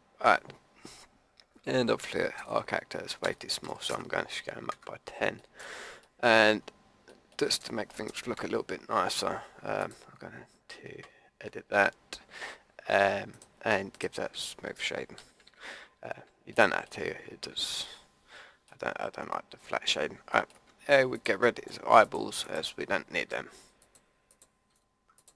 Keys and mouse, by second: 3.2 s, 8.3 Tab, 11.1 Tab, 15.2 a, 15.4 Tab, 21.1 right click, 24.7 Delete.